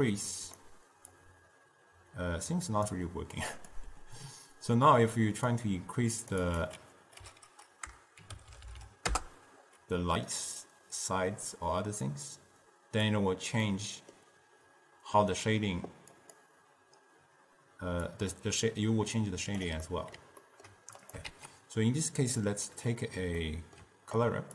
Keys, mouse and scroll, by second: 5.6-8.6 drag, 8.6 0, 8.7 0, 11.3-13.7 drag, 13.7-16.2 middle drag, 16.2 click, 18.2-20.0 drag, 20.0-21.1 middle drag, 21.1 click, 21.4 shift+d, 23.0-24.5 middle drag.